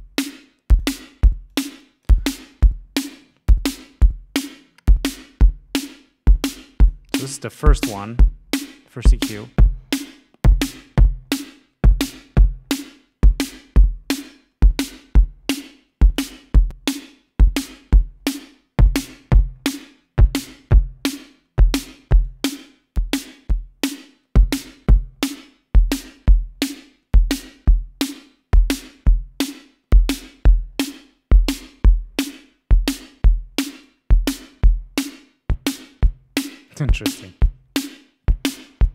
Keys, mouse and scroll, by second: 0.4 click, 1.7 click, 3.9-4.8 scroll up 2, 5.4 scroll up 1, 6.5 click, 8.7-9.0 scroll up 1, 9.7-10.2 scroll up 2, 11.5-12.1 scroll down 4, 12.7-13.0 scroll down 2, 14.0 scroll down 2, 14.6 scroll down 2, 16.3-17.8 drag, 18.6-18.9 scroll up 2, 19.8-20.1 scroll up 2, 21.1-21.6 scroll up 2, 22.4-25.4 drag, 25.7 click, 27.6 click, 31.8-33.0 scroll down 6, 34.0 click, 35.4 scroll down 2, 35.8-36.2 scroll up 2, 36.9 click.